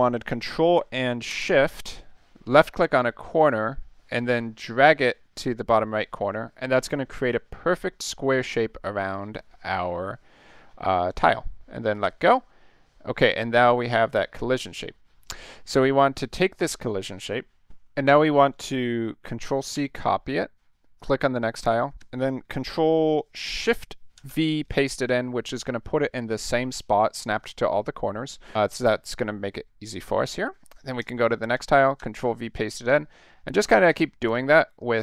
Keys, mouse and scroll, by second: 2.8-11.9 ctrl+shift+drag, 19.8 ctrl+c, 21.0 click, 22.0 ctrl+v, 24.1 ctrl+shift+v, 31.0 click, 32.0 ctrl+shift+v, 32.9 click, 33.7 ctrl+shift+v, 34.3 click, 34.8 ctrl+shift+v.